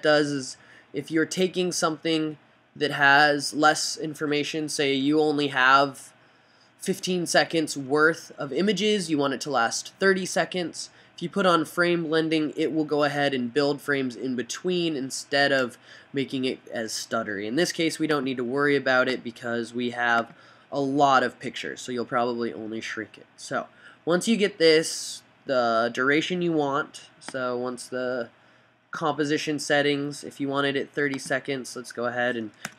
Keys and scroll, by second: 32.2 fn+Right.